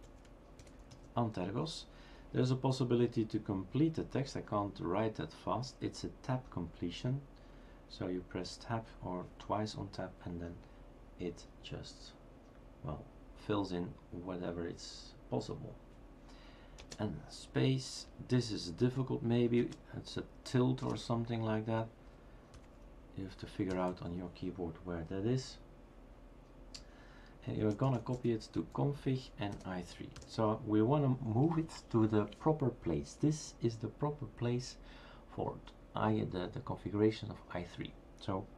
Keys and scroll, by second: 1.9 typing, 16.8 space, 20.9 space, 22.6 typing, 24.7 typing, 27.4-28.6 typing, 29.9-30.6 typing.